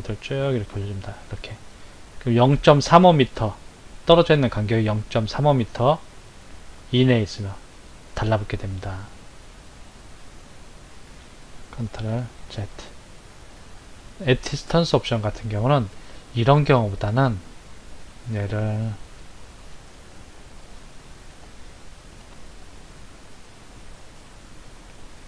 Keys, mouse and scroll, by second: 12.2 ctrl+z, 14.6 click, 16.2 scroll down 2, 19.7 Tab, 21.1 Delete, 22.4 shift+a.